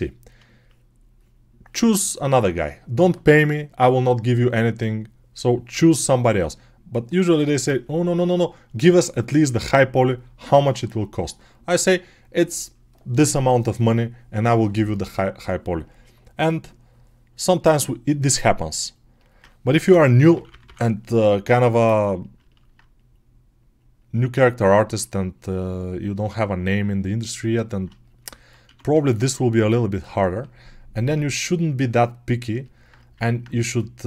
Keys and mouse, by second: 19.5-20.5 typing, 24.2 1, 28.5 1.